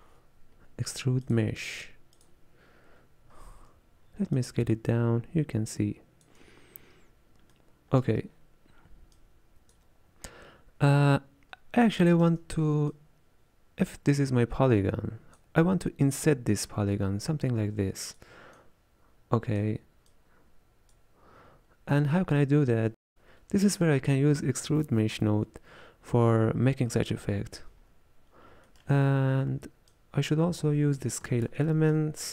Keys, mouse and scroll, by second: 3.0-3.4 scroll down 3, 3.4-4.5 scroll up 1, 4.5-7.0 shift+drag, 7.0-7.5 scroll up 1, 7.5-9.2 middle drag, 9.2-12.1 drag, 12.1 shift+middle click, 12.9-30.4 drag.